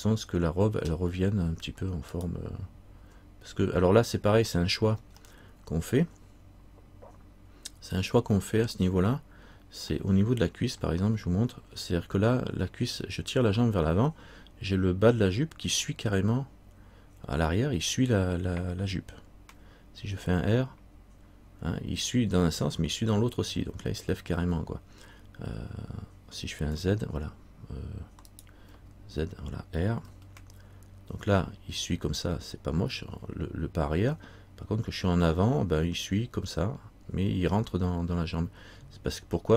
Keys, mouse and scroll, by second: 0.3 middle click, 2.3 right click, 2.3-3.1 scroll down 1, 3.1 z, 5.4 middle click, 10.1 middle click.